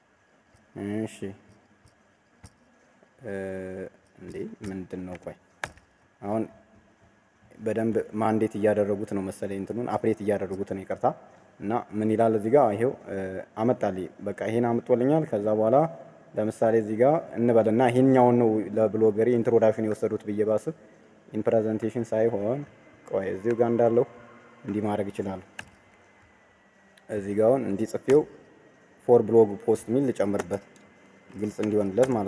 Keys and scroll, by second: 5.6 ctrl+v, 25.4 ctrl+c, 28.0 ctrl+v.